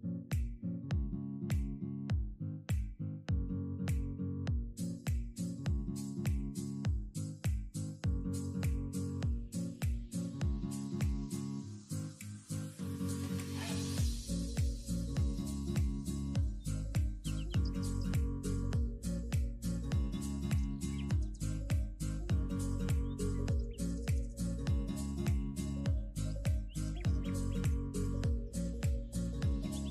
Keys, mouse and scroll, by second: 0.4 x, 1.0 middle click, 1.5 scroll up 4, 1.8-2.8 middle drag, 2.8 ctrl+KP_1, 3.0-3.4 scroll down 5, 3.4 alt+z, 3.6 middle click, 4.2 click, 4.5 3, 4.6 click, 5.0 KP_3, 5.1 alt+z, 5.4 shift+middle click, 5.7 scroll down 1, 6.0 e, 7.4 middle click, 7.7 scroll down 1, 7.9 scroll up 2, 8.1 s, 8.6 KP_3, 9.2 s, 10.1 middle click, 10.8 e, 12.0 KP_3, 12.6 ctrl+KP_1, 13.0 alt+z, 13.7 e, 14.1 r, 14.8 g, 16.0 ctrl+z, 16.4 r, 19.2 e, 20.1 r, 21.3 r, 21.8 g, 23.1 scroll down 2, 23.3 g, 24.7 ctrl+r, 25.6 ctrl+r, 26.5 ctrl+r, 27.3-27.7 scroll up 2, 27.7 ctrl+r, 28.3 scroll down 2, 28.4 middle click, 29.2-29.9 scroll up 5.